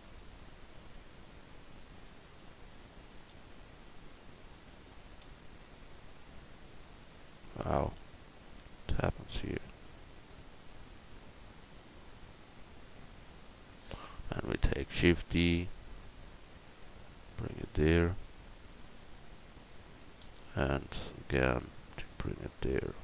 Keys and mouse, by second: 3.3 l, 5.2 alt+d, 5.6-8.0 right drag, 8.0 l, 15.0 shift+d, 16.1-18.2 drag, 20.2 shift+d, 21.0-23.0 drag.